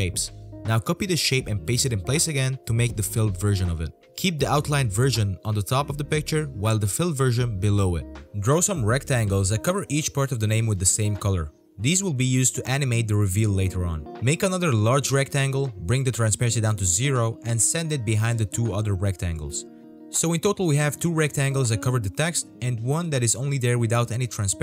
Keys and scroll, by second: 5.6 v, 8.2 i, 8.3 v, 11.8 alt+v, 14.4 z, 18.0 z, 20.9 v.